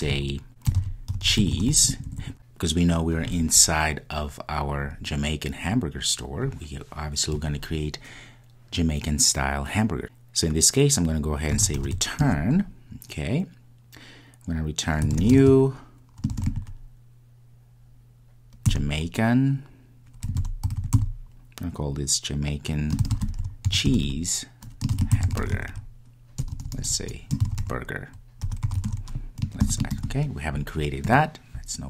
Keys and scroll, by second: 12.3 Return.